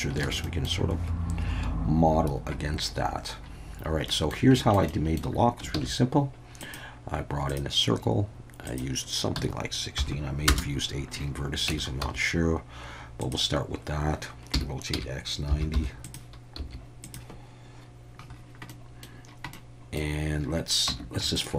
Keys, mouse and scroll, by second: 0.2 alt+a, 0.4 click, 4.1 middle click, 4.6 shift+middle click, 4.9 middle click, 5.7 shift+a, 8.6-11.1 drag, 11.7 Tab, 12.0 s, 13.2 click, 14.5-16.6 typing, 16.0 click, 17.0 click, 18.8 middle click, 19.5 middle click, 20.9 Tab.